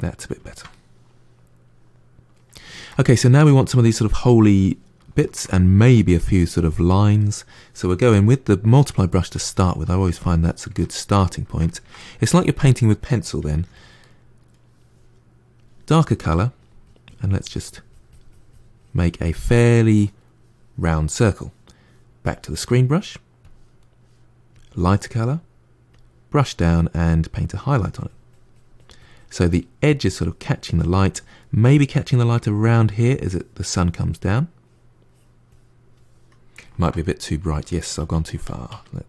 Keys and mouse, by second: 8.0 f, 9.2-10.7 drag, 10.7-13.4 ctrl+middle drag, 13.4 f, 13.9-15.4 middle drag, 15.4 click, 16.4-24.6 drag, 25.0 f, 26.5-36.5 drag, 36.5-37.7 ctrl+middle drag, 37.7 ctrl+z, 37.9 ctrl+z, 38.1 ctrl+z, 38.3 ctrl+z, 38.6 ctrl+z.